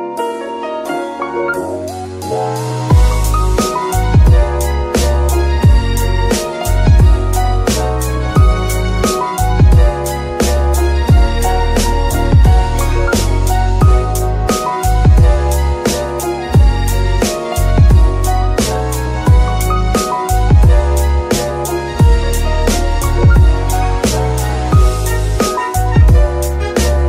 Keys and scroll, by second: 12.1 g, 12.6 Escape, 15.6 g, 16.2 Escape, 19.1 g, 19.5 Escape, 22.7 g, 23.1 Escape.